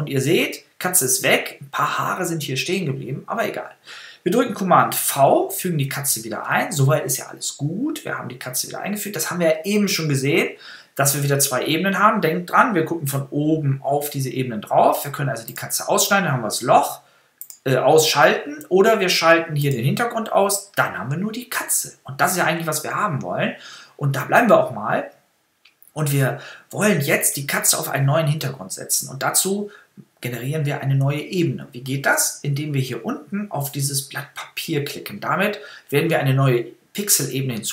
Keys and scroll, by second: 5.0 super+v.